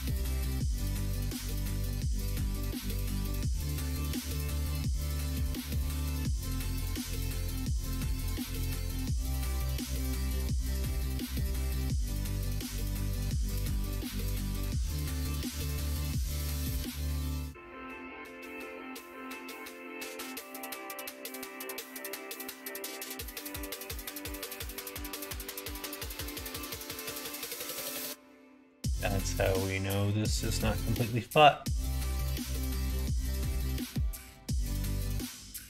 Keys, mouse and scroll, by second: 0.0 ctrl+z, 0.3 ctrl+z, 1.0 middle click, 1.7 middle click, 2.5 ctrl+r, 4.2 right click, 5.0 2, 6.0 click, 6.3 f, 7.0 click, 8.0 f, 9.8 l, 11.5 shift+n, 13.2 middle click, 14.7-17.6 drag, 21.0 click, 21.2 click, 21.4 click, 21.6 click, 21.7 click, 22.6-24.2 middle drag, 25.0 ctrl+z, 26.9 click, 27.6 middle click, 28.9 middle click, 29.4 l, 30.0 middle click, 30.6 middle click, 32.2 s, 34.6 ctrl+z.